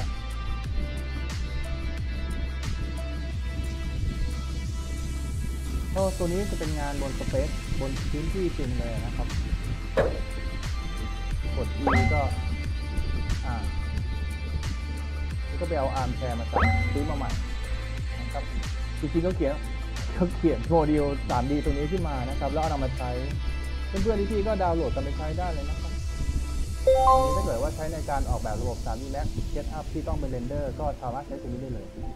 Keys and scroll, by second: 2.2 d, 3.7 w, 4.9 d, 5.3 w, 8.6 w, 10.3-11.8 typing, 13.0 w, 16.6 e, 18.1 w, 23.5-25.3 typing, 27.2 w, 27.6 a, 28.3 w.